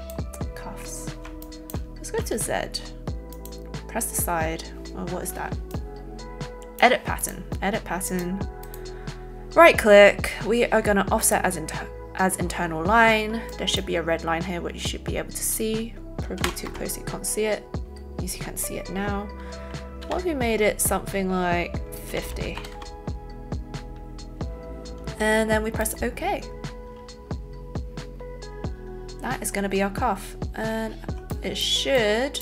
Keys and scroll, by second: 2.1 alt+z, 16.4 KP_3, 16.6 KP_0, 22.8 KP_5, 22.8 KP_0.